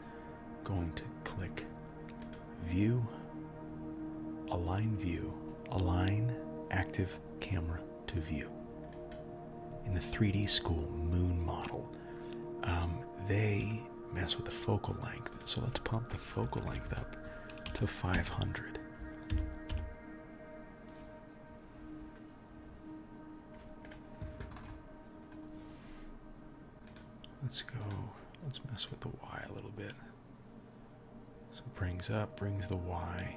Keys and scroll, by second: 16.9 Right, 19.3 g.